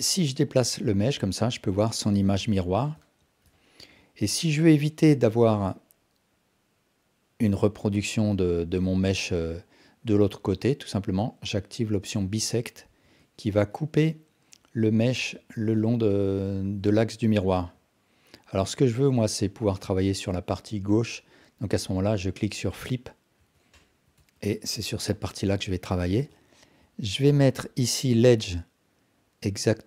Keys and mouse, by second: 0.6-1.8 drag, 2.6 alt+click, 3.0 Tab, 3.5 alt+click, 4.4 Tab, 13.0 Tab, 13.5 Tab, 14.1-15.3 drag, 15.4 Tab, 15.8 alt+drag, 17.0 alt+click, 17.6 Tab, 18.6-19.4 drag, 20.1 Tab, 20.5 Tab, 23.4 Tab, 23.8 alt+click, 24.2 Tab, 25.5 KP_1, 26.3-26.7 alt+shift+drag, 28.5-29.8 drag.